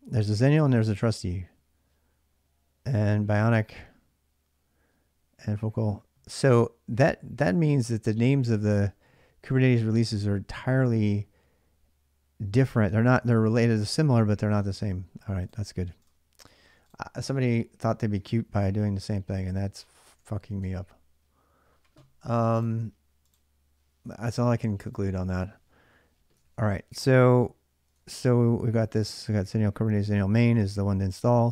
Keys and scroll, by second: 17.5-20.4 typing, 26.2 ctrl+a, 26.4 ctrl+a, 27.6-30.5 typing.